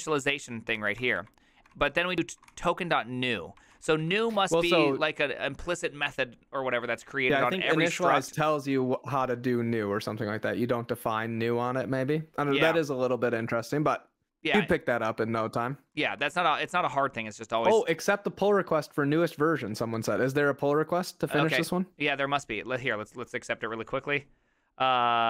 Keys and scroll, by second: 0.8 ctrl+c, 1.0 ctrl+d, 1.7-4.8 typing, 3.8 ctrl+c, 12.7 ctrl+c, 14.6-18.7 typing.